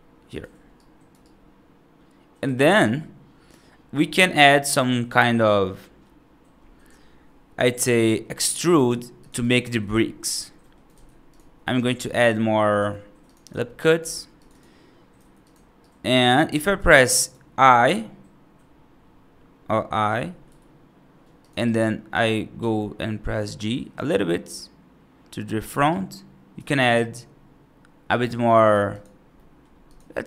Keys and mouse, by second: 0.6 right click, 1.1-2.3 right drag, 2.7 right click, 3.9 middle click, 5.4 middle click, 7.7 right click, 8.6 ctrl+r, 9.8 middle click, 10.5 middle click, 10.8 ctrl+r, 12.6 ctrl+r, 13.9 ctrl+r, 15.0 3, 15.3 click, 15.7 right click, 16.9 right click, 19.6 middle click, 20.3 i, 21.5 right click, 22.4 g, 25.8 right click, 26.8 right click, 28.0 right click, 29.2 middle click, 29.7 click.